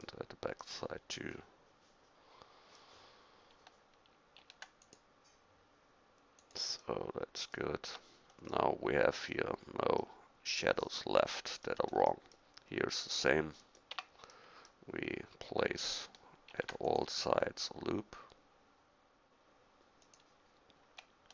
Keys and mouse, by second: 4.4 ctrl+r, 7.9 Tab, 10.8-11.1 middle drag, 13.9 Tab, 16.5 ctrl+r.